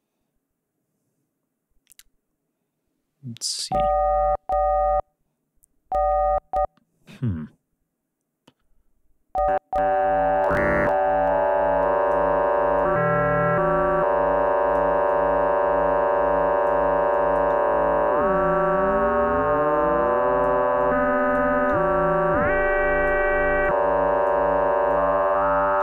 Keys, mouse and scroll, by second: 9.4-12.3 drag, 12.7 click, 15.0-16.8 drag, 17.1-20.6 drag, 20.8 click, 21.7-23.2 drag, 23.6 click, 24.9-25.8 drag.